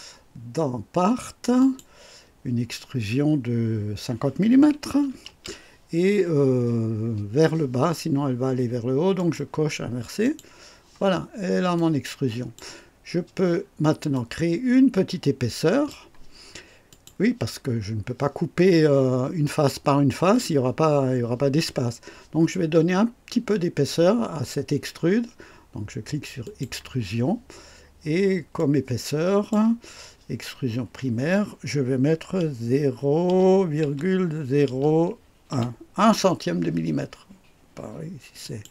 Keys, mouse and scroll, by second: 1.5 click, 4.8 KP_5, 5.2 KP_0, 9.1 click, 10.1 click, 11.1 scroll down 1, 11.7 click, 13.5 scroll up 2, 14.0-16.0 drag, 16.8 click, 17.7-18.0 scroll up 1, 26.3 click, 28.5 click, 33.2-35.6 typing, 38.3 click.